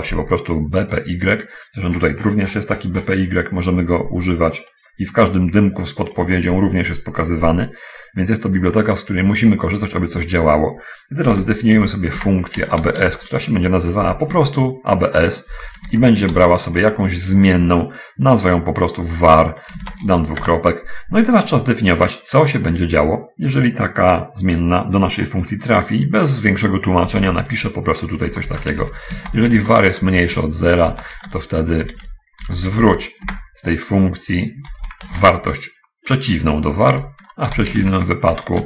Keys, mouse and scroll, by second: 0.0 Return, 1.9-2.8 scroll up 1, 4.7 click, 11.6-14.2 typing, 15.6 v, 16.2 a, 16.6 shift+r, 16.7 shift+0, 20.0 shift+;, 20.7 shift+Return, 27.4 i, 27.4 f, 28.7-33.4 typing, 31.7 Return, 34.8 -, 34.8 v, 35.4 a, 35.5 r, 37.2 Return, 37.8-38.6 typing.